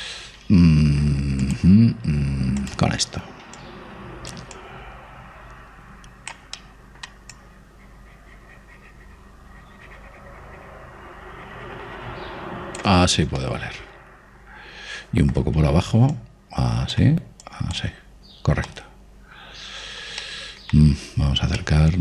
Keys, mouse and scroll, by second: 2.5 click, 4.7-7.5 drag, 7.6-9.8 middle drag, 8.4 click, 14.1-16.2 middle drag, 16.7-22.0 middle drag, 17.3-20.4 drag.